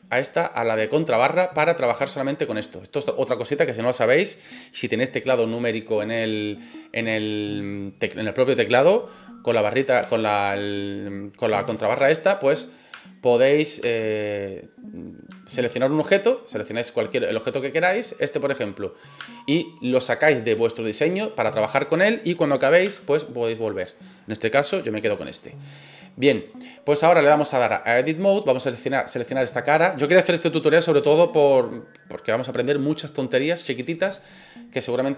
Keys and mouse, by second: 1.3-4.5 middle drag, 12.5-13.6 middle drag, 14.4 middle click, 16.6 click, 17.1 click, 17.8 right click, 19.2 KP_Divide, 19.5-22.6 middle drag, 23.7 right click, 25.1-25.5 middle drag, 25.9 middle click, 27.2 click, 28.4 right click, 29.1 right click, 30.4 click.